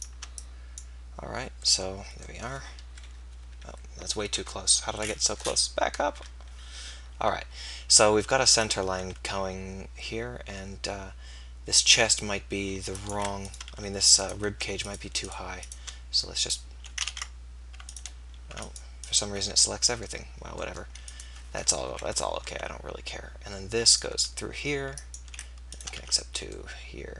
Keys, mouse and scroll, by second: 1.7-3.0 middle drag, 3.0 KP_Decimal, 3.4 KP_3, 4.2 KP_1, 6.1 KP_3, 9.4 e, 13.8 f, 16.0 right click, 17.3 ctrl+z, 20.6-21.9 middle drag, 21.9 KP_3, 22.5 e, 24.1 e, 26.1 f.